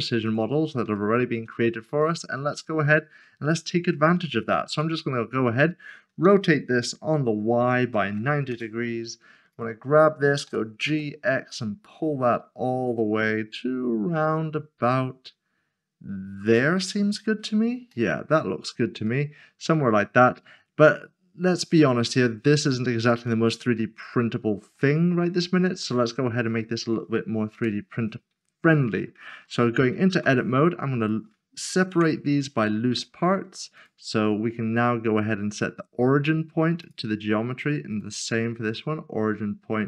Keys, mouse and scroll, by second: 0.2 click, 1.0 shift+middle click, 2.0 shift+middle click, 2.8 click, 7.8 typing, 8.5 Return, 10.5-10.8 typing, 16.4 x, 16.5 click, 17.9 shift+middle click, 18.6 scroll up 1, 19.2 middle click, 22.8-23.2 scroll down 1, 23.4 middle click, 24.9 shift+middle click, 25.6 scroll up 1, 27.5 Tab, 30.1 p, 31.0 click, 31.9 Tab, 32.7 middle click, 33.0 scroll down 1, 33.7 click, 34.7 right click, 36.8 click.